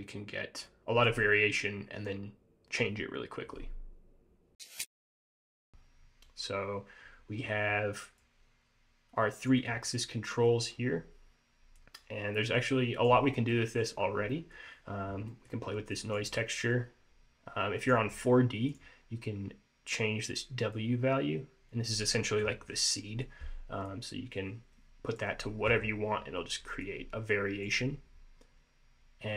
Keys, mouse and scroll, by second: 5.5-7.4 scroll down 4, 7.5-8.0 scroll up 3, 8.3 click, 10.0 middle click, 10.8-11.3 scroll down 2, 11.9 click, 13.6 middle click, 14.1-14.4 scroll up 2, 14.4 middle click, 15.4 middle click, 16.1 click, 16.4 scroll up 1, 17.9 click, 20.8 click, 24.0 click, 26.9 click.